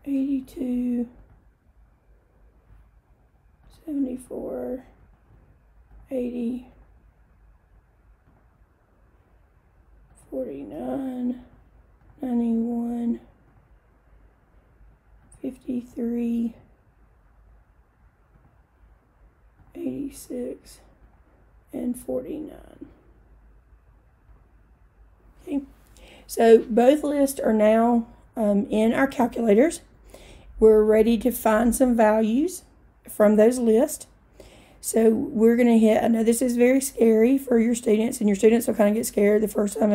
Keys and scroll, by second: 0.5 2, 1.3 Return, 3.7 7, 4.2 4, 5.1 Return, 6.0 8, 6.8 0, 8.3 Return, 10.2 4, 10.8 9, 11.5 Return, 12.0 9, 12.7 1, 13.5 Return, 15.3 5, 15.9 3, 18.4 Return, 19.7 8, 20.3 6, 21.1 Return, 22.0 4, 22.8 9, 24.4 Return.